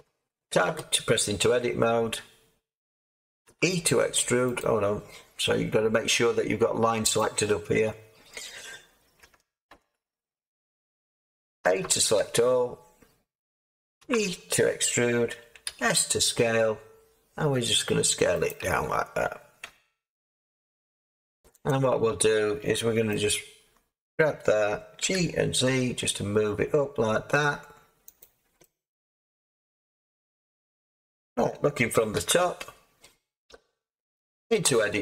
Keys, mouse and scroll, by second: 3.4 e, 9.2 Tab, 9.6 Tab, 11.6 a, 11.8 a, 12.1 a, 14.0 e, 15.6 s, 19.6 Tab, 20.6 Tab, 25.0 Tab, 25.0 g, 25.6 z, 30.0 Tab, 32.1 7, 34.6 Tab.